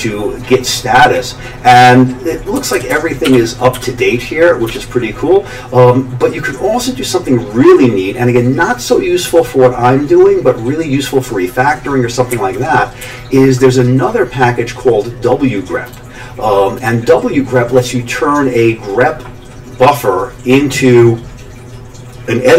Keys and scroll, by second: 2.5 Down, 2.7 Down, 2.9 Down, 3.2-4.7 typing, 12.3 Up, 13.0 Down.